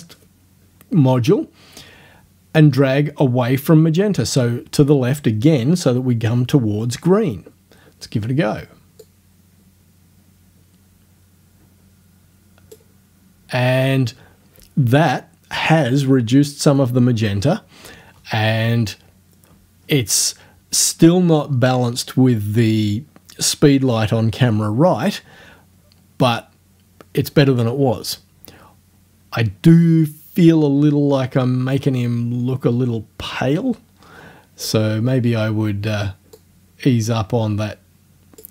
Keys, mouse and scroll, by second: 9.0 click, 36.4 click.